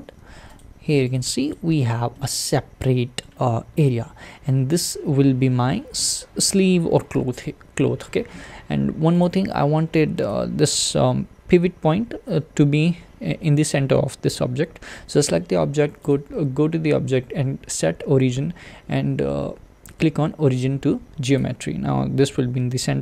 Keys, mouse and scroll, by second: 1.1 click, 1.5 click, 2.1-4.5 middle drag, 4.5 s, 7.1 `, 9.2 click, 10.3 click, 10.9 click, 11.5 s, 21.4 click.